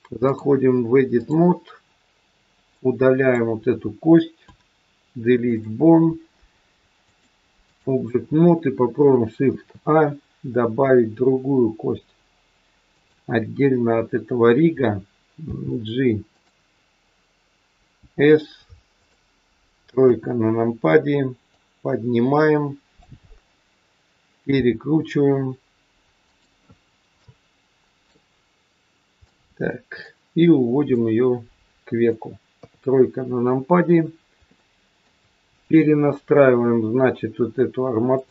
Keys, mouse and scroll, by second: 0.2 click, 2.7 click, 4.5 Delete, 7.0 click, 9.3 shift+a, 13.9-15.5 scroll down 4, 15.5 g, 18.0 s, 20.0 KP_3, 21.5 click, 23.2-24.5 scroll up 4, 24.5 r, 26.7-27.2 scroll up 2, 27.2 middle click, 29.2 middle click, 30.9 click, 32.5 KP_3, 33.5-34.0 scroll down 2, 34.6 shift+middle click, 35.6 click, 38.0 click.